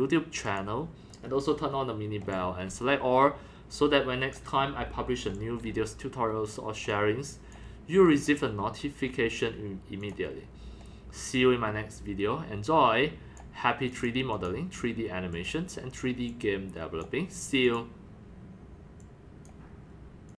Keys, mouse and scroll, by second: 0.4 click, 1.2-1.5 scroll down 4, 1.7 scroll up 2, 2.2-6.2 typing, 2.3-3.6 drag, 4.3 click, 4.6 middle click, 4.6 scroll up 1, 4.8 scroll down 1, 5.4 click, 6.5 click, 8.1 click, 8.5 click, 10.3-11.9 drag, 11.9 scroll down 3, 12.1 click, 12.5 scroll, 13.4 click, 13.9 click, 14.3 click, 15.3 click, 16.3 click, 17.6 click, 19.0 click, 19.3 click.